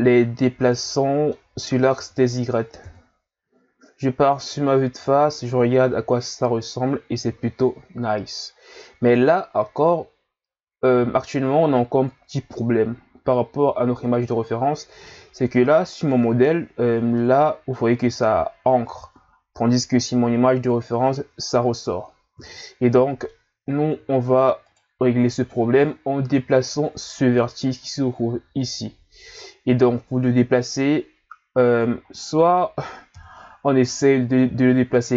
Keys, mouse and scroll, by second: 0.9-1.9 middle drag, 1.9 Tab, 2.8 KP_1, 4.4 scroll down 2, 4.4-5.3 middle drag, 5.3-5.6 shift+scroll up 1, 6.5-8.3 scroll up 1, 8.3-9.6 scroll up 1, 9.6 scroll up 1, 17.2-20.2 middle drag, 22.6-23.7 middle drag, 23.7 Tab, 24.6 right click, 26.6 ctrl+scroll up 2, 27.8-31.0 ctrl+scroll down 2, 32.1-33.2 middle drag, 33.2 KP_1, 34.7 click.